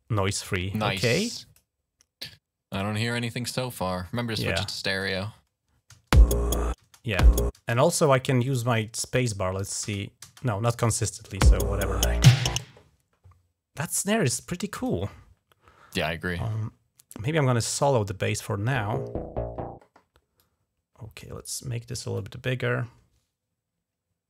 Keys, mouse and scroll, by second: 0.8 click, 2.1 click, 4.0 click, 6.1 space, 6.6 space, 7.0 space, 7.4 space, 7.6 click, 8.3 click, 9.0 click, 9.4 click, 9.7 space, 10.6 click, 13.7 click, 17.6 click, 20.2 click, 22.0-24.2 drag.